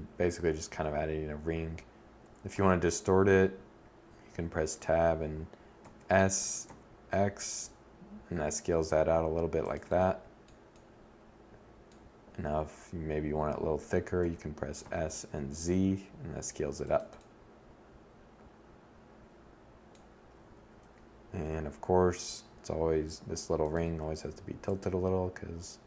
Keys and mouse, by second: 1.0 Tab, 4.3 s, 8.2 click, 12.6 s, 15.6 click, 17.3 middle click, 18.8 2, 19.2 1, 20.0 2, 21.1 r, 25.5 Tab.